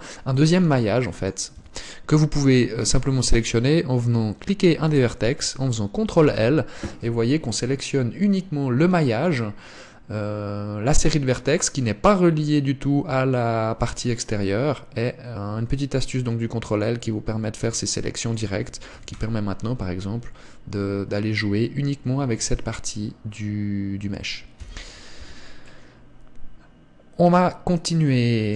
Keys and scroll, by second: 1.9 Tab, 6.5 ctrl+l, 25.6 Tab.